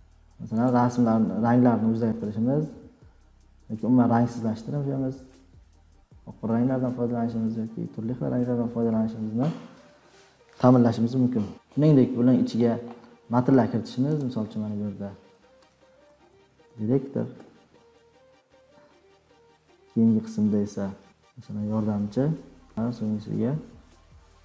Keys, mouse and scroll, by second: 10.7 click, 14.2 click, 15.5-18.1 typing, 20.6-22.0 drag, 21.9-24.4 typing, 23.7-24.4 drag.